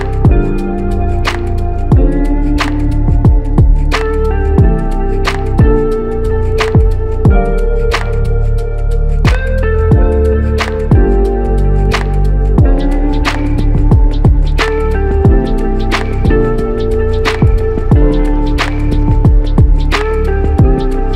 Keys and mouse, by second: 1.0 double click, 2.4 alt+click, 3.5 double click, 5.7 alt+click, 7.3 double click, 7.8 alt+click, 9.1 double click, 11.3 alt+click, 12.3 shift+click, 13.6 alt+click, 16.6 double click, 18.2 alt+click, 19.5 double click, 20.6 alt+click.